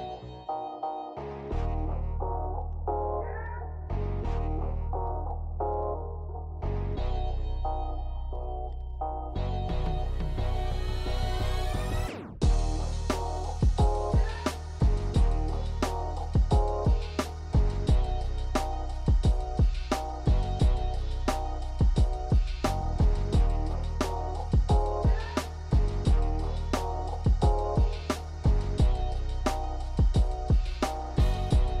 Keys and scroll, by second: 19.9 s.